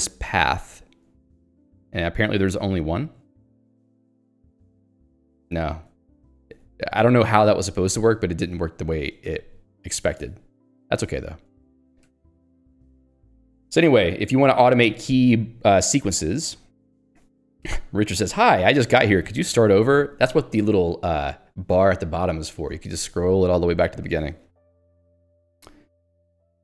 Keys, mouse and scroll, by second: 3.2 h, 4.0 l, 4.9 ctrl+d, 6.1 q, 6.5 Escape, 8.2 click, 8.5 Escape, 9.3 shift+v, 10.2 Escape, 12.6 Escape, 12.9 ctrl+d, 14.7 j.